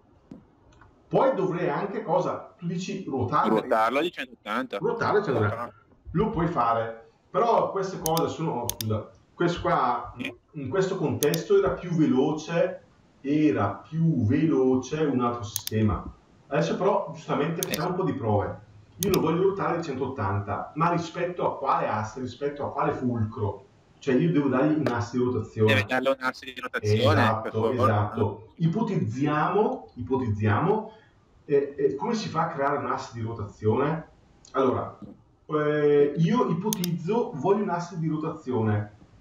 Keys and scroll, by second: 5.9 ctrl+Escape.